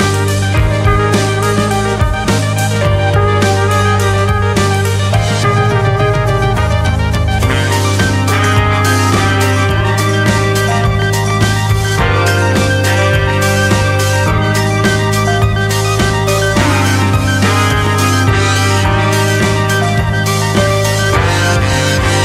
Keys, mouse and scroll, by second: 0.0-1.3 drag, 4.5 click, 6.8-18.3 drag, 19.1 click.